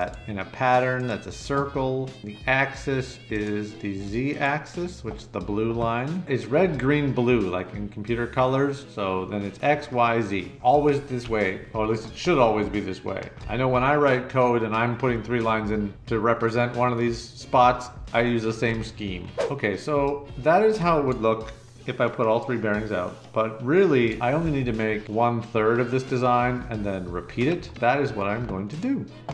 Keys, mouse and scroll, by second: 0.9 click, 3.3 click, 4.3 click, 22.6-24.1 drag.